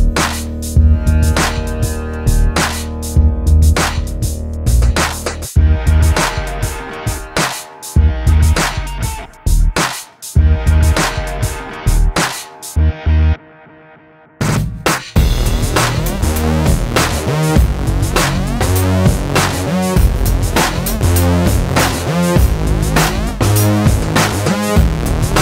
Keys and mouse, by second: 0.3 ctrl+z, 0.4 KP_7, 1.0 a, 1.2 ctrl+s, 1.7 ctrl+Tab, 2.9 click, 3.4 click, 7.2 click, 7.5 a, 9.9 Escape, 10.4 click, 10.6 Tab, 11.2 click, 11.4 click, 11.6 KP_1, 13.7 ctrl+Tab, 15.0 i, 18.7 middle click, 18.8 ctrl+Tab, 19.4 click, 19.7-20.8 middle drag, 21.1 middle click, 22.0 middle click, 23.0 middle click, 25.3 Escape.